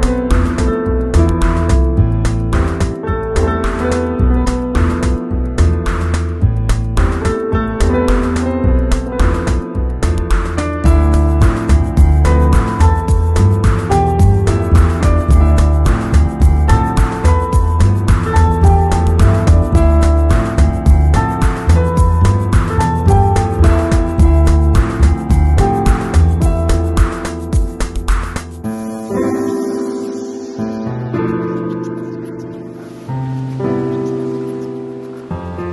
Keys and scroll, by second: 7.3 shift+Return, 7.8 Return, 10.4 super+u.